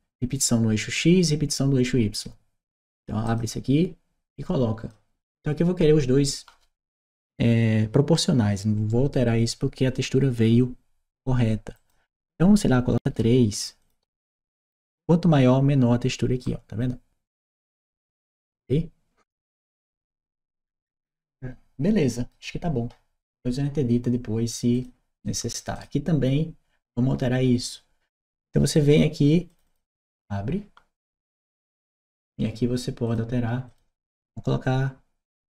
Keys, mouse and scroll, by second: 3.1 click, 4.2-4.7 drag, 11.6 click, 13.6 click, 14.6 Return, 16.2-20.8 right drag, 21.3 right click, 24.6 click, 25.0 click, 25.0 right click, 25.6 click, 29.3 click, 29.5 click, 31.7 click, 32.9 click, 33.5 click.